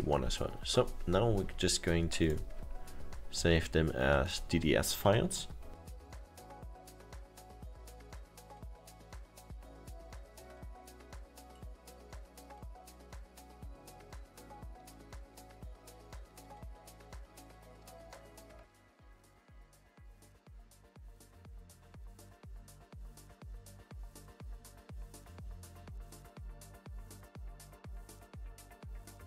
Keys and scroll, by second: 8.6 ctrl+w, 12.5 ctrl+w, 16.9 ctrl+w, 19.7 ctrl+w, 28.0 ctrl+w.